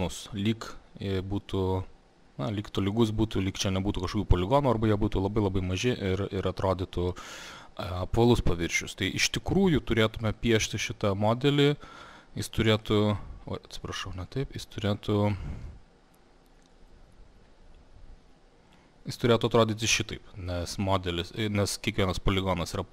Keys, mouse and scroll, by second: 9.4 click, 12.9 click, 14.1 click, 19.0 click.